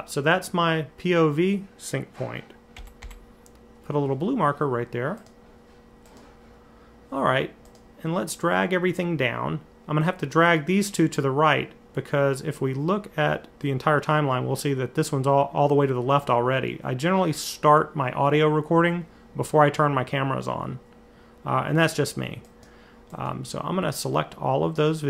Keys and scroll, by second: 2.6 m, 2.8 m.